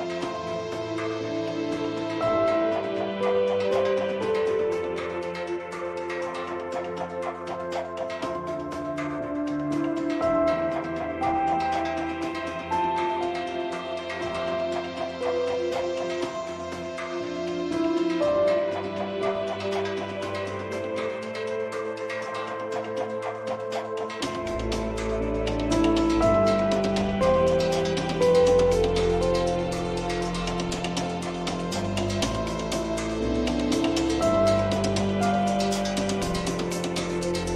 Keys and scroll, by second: 31.9 2, 32.2 Return.